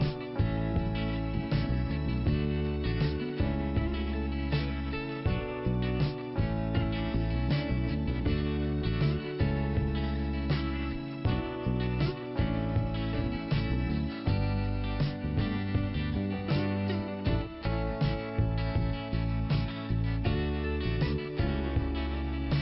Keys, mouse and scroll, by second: 1.4 scroll up 2, 3.1 click, 3.2 click, 3.9 scroll up 1, 4.2 right click, 4.3 right click, 5.0 click, 6.2 click, 6.7 click, 8.6 click, 9.1 click, 10.0 right click, 10.4 scroll down 2, 11.2 click, 17.2 click, 19.5 scroll down 2, 20.6 middle click.